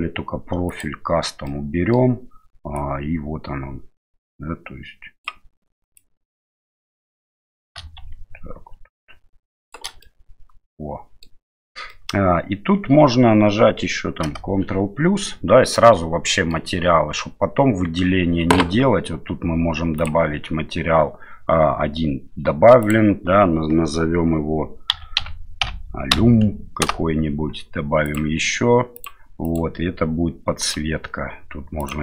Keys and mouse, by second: 0.7 click, 1.5 middle click, 2.7-5.2 drag, 5.9-9.7 drag, 10.1-11.3 middle drag, 12.0 middle click, 14.2 ctrl+KP_Add, 15.7 middle click, 17.8 Tab, 22.9-27.4 drag, 28.1 click, 28.9 click, 29.5 click, 30.7-31.9 drag.